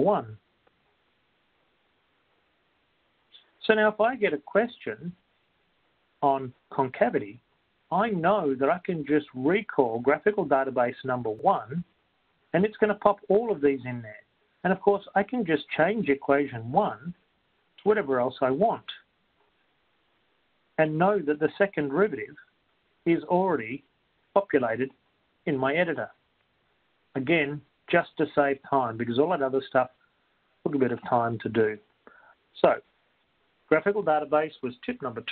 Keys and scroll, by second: 1.4 1, 1.9 Return, 22.1 x, 22.7 ).